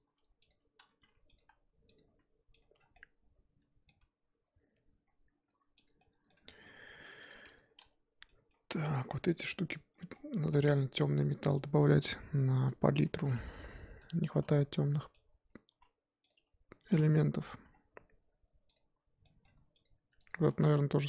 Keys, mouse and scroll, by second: 0.9 r, 2.0 Tab, 2.6 click, 2.8 scroll down 4, 2.9-4.0 middle drag, 4.0 Tab, 5.0-5.5 scroll up 1, 5.5 Tab, 6.0-7.3 middle drag, 7.3 click, 7.5 Tab, 7.8 a, 10.0 click, 13.5 g, 15.5 click, 15.7 s, 17.4 z, 17.5 Tab, 17.7-18.1 scroll down 4, 18.7 click, 19.2-19.8 middle drag, 20.0 Tab, 20.2 click, 20.5 Tab, 20.6 click, 21.0 Tab.